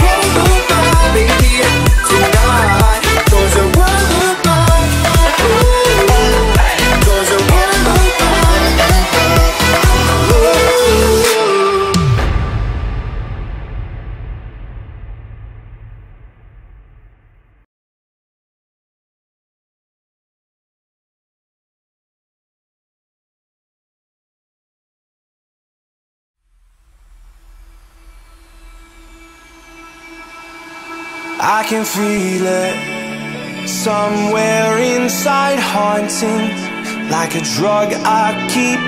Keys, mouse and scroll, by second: 0.2 click, 0.9 space, 1.1-2.0 scroll down 1, 2.1-2.7 scroll down 1, 2.7 click, 3.1-4.1 scroll up 1, 4.1 p, 4.5 click, 6.1-7.1 typing, 6.8 Return, 7.3-7.7 scroll down 1, 8.3 scroll up 1, 8.8 middle click, 9.7 e, 10.0 click, 10.5 space, 10.6 scroll down 1, 11.6 middle click, 12.3 scroll up 1, 12.9 click, 13.9 shift+click, 14.6 right click, 15.5 click, 16.5 middle click, 17.0 scroll down 1, 18.6 scroll up 1, 19.7 r, 20.4 click, 23.2 space, 23.5 click, 23.7 right click, 24.5 click, 25.9 l, 26.8 click, 28.3 space, 29.3 f, 29.8 click, 30.7-32.2 typing, 31.8 Return, 32.6 click, 33.3 f, 33.4 click, 33.6 space, 34.2 click, 34.4 ctrl+click, 35.2 ctrl+c, 35.4 space, 35.6 click, 36.5 Delete, 37.7 click.